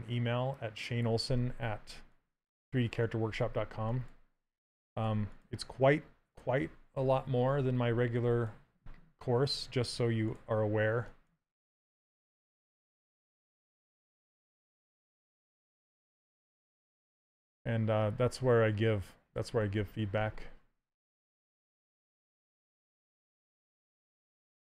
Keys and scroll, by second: 10.7 s.